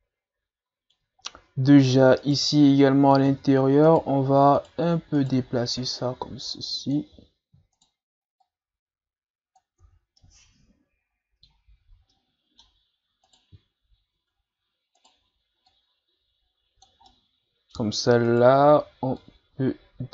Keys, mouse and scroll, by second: 1.2-2.2 ctrl+scroll up 4, 2.2 right click, 2.8 middle click, 3.3 Tab, 3.9 right click, 4.6 shift+right click, 5.2 shift+right click, 6.0-7.7 drag, 7.7 shift+right click, 8.4-9.8 drag, 9.8 Tab, 10.2-13.3 middle drag, 13.3 right click, 13.7 scroll down 2, 14.2 Tab, 15.0 right click, 15.7 click, 17.1-18.3 middle drag, 18.3 right click, 19.2-20.1 drag.